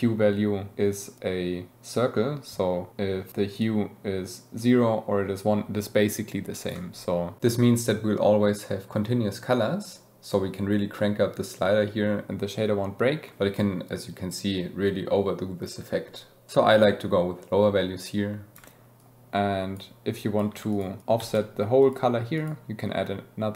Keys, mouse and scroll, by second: 0.1-3.9 middle drag, 4.0 middle click, 5.4 middle click, 6.7 middle click, 7.4-9.3 middle drag, 10.0 middle click, 12.3 middle click, 12.4-16.5 drag, 19.8-20.2 middle drag, 20.4 middle click, 20.8 middle click, 21.2 shift+d, 21.3 middle click.